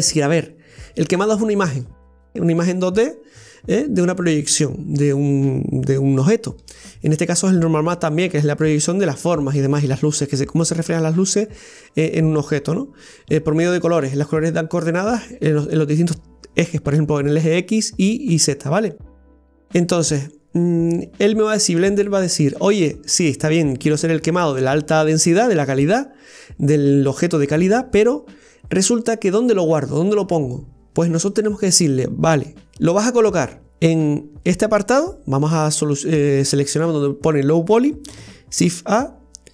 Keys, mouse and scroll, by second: 33.7 click.